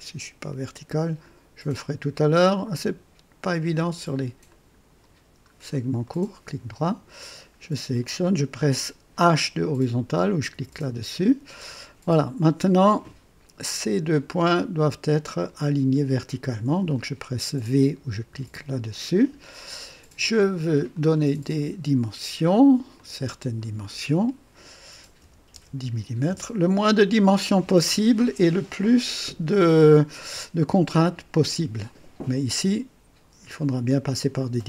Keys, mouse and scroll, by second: 2.3 click, 4.4 click, 5.4 scroll up 2, 6.0 right click, 6.6 right click, 7.9 click, 10.4 h, 14.0 click, 15.4 click, 18.2 v, 20.8 click, 22.9 click, 25.1-26.4 typing, 26.2 KP_Enter.